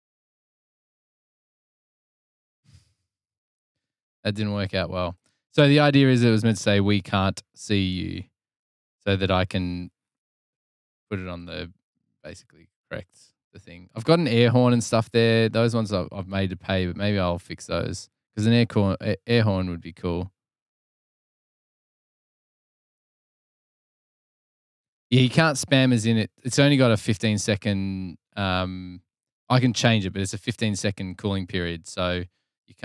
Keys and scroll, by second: 4.5 super+w.